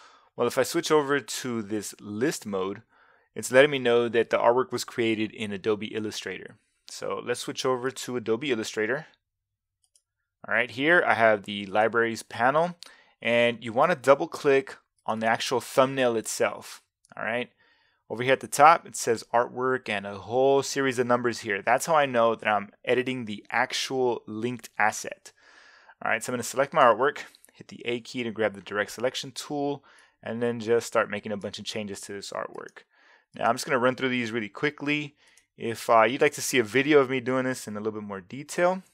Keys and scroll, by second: 27.9 a.